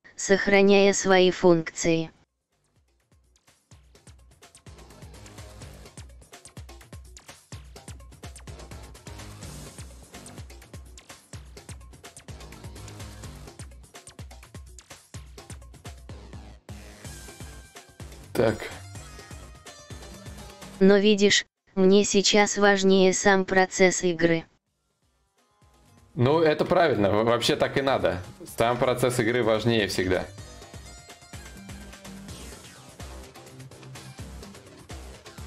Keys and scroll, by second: 6.7 ctrl+z, 8.1 ctrl+z, 9.5 ctrl+z, 9.5 /, 25.2 ctrl+z.